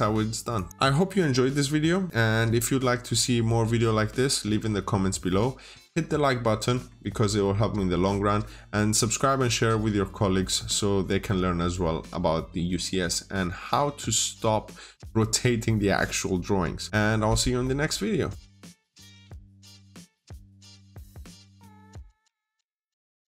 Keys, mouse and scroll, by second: 0.4 click.